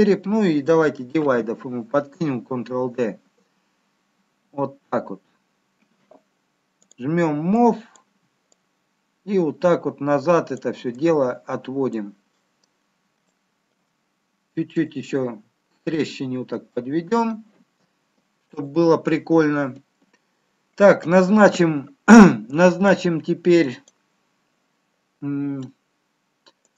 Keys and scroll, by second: 1.4 ctrl+d.